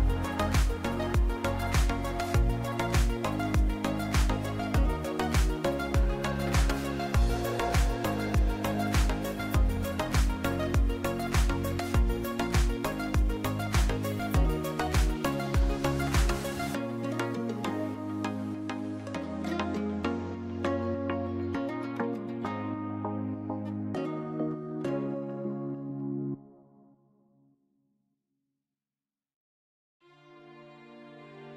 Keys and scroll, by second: 1.5 3, 2.4 shift+z, 4.8 shift+d, 6.0 p, 6.8 Tab, 7.6 Tab, 8.2 a, 12.2 s, 14.9 ctrl+z, 15.8 Tab, 16.5 ctrl+a, 17.8 Tab, 18.4 s.